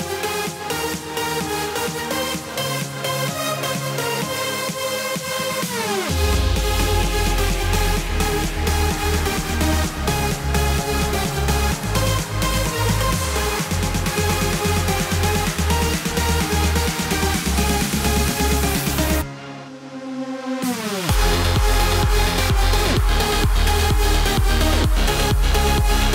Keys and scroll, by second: 22.0 ctrl+BackSpace.